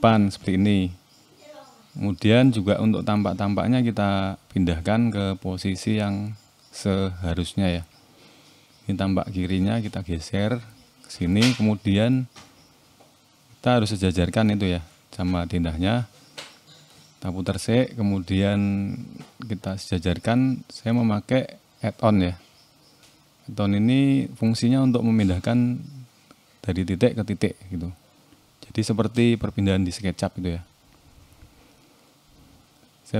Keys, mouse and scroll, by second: 0.1 middle click, 1.4 click, 1.7-2.3 scroll down 2, 2.1 click, 2.5 middle click, 3.0 click, 3.3 middle click, 5.6 r, 9.9 click, 11.1 middle click, 11.5 shift+middle click, 12.4 click, 13.2 middle click, 13.5 scroll up 1, 14.4 middle click, 15.6 r, 18.9 middle click, 20.2 click, 21.1 click, 22.0 middle click, 24.0 scroll up 1, 24.4 middle click, 25.9 Tab, 25.9 middle click, 26.8 Tab, 27.1 middle click, 28.7 n, 31.5 click.